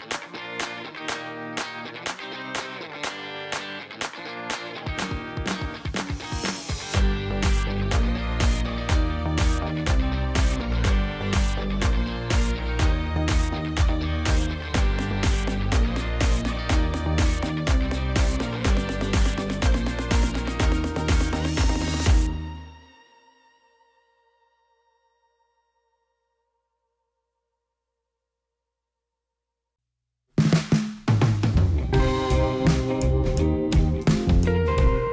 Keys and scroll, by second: 5.7 i, 12.3 e, 21.7 g, 22.0 z.